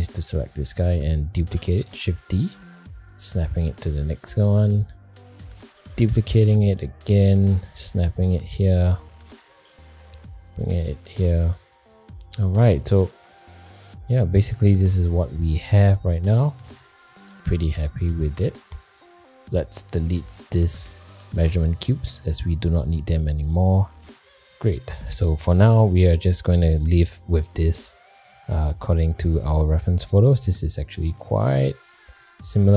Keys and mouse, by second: 0.4 shift+middle drag, 1.4 shift+d, 4.1 middle click, 4.7 shift+middle click, 5.7 shift+d, 9.2 middle click, 9.6 g, 11.5 middle drag, 12.3 middle click, 12.7 click, 13.7 middle drag, 15.8 middle click, 16.7 middle drag, 17.1 shift+middle drag, 17.5 middle click, 18.3 shift+middle click, 18.6 middle click, 20.9 shift+click, 21.3 x, 22.8 middle click, 23.5 shift+middle click, 25.5-26.0 middle drag, 26.7-27.0 middle drag.